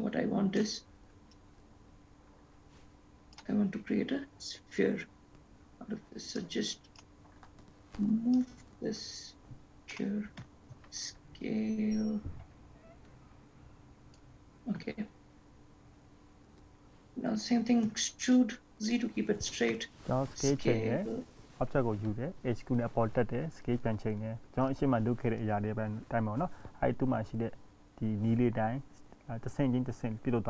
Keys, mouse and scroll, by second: 0.8 click, 1.6 click, 5.3-5.8 scroll down 1, 5.8-6.6 scroll up 1, 6.6 click, 8.6 click, 10.6 g, 29.8 s.